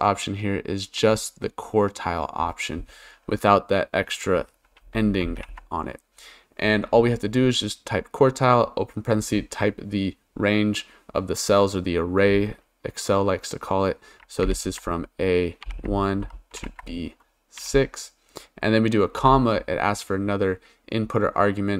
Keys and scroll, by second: 5.4 shift+9, 14.4 shift+a, 15.6 1, 16.2 shift+;, 16.6 shift+b, 17.6 6, 19.2 ,.